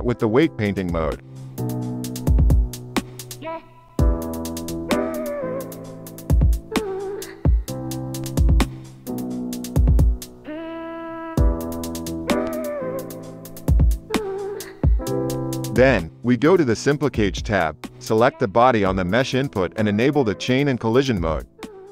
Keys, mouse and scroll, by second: 17.6 click, 18.2 click, 20.0-21.9 drag.